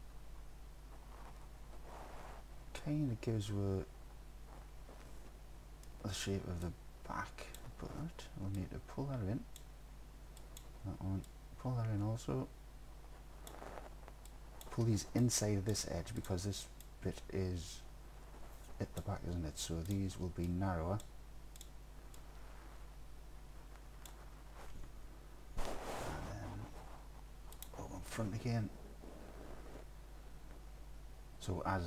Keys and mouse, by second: 6.0 middle click, 6.1 click, 6.7 ctrl+click, 8.7 click, 10.4 ctrl+click, 11.3-13.5 drag, 14.3-14.6 drag, 15.3 click, 16.2 click, 17.0-19.0 drag, 20.5 click, 22.2-24.1 drag, 27.6 click.